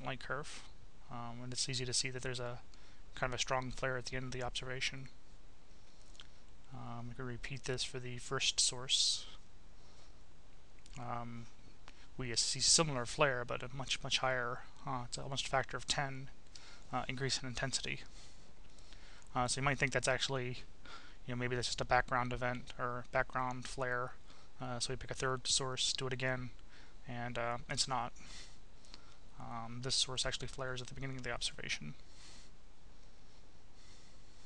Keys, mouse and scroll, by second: 2.7-3.7 drag, 4.3-5.8 drag, 6.4 click, 8.9 click, 11.3-13.1 drag, 13.4-16.1 drag, 19.1 click, 20.2 click, 21.6 click, 22.6 click, 23.6-25.1 drag, 25.6 click, 27.8 click, 31.7 click, 32.5 click, 33.6 click, 34.3 Delete.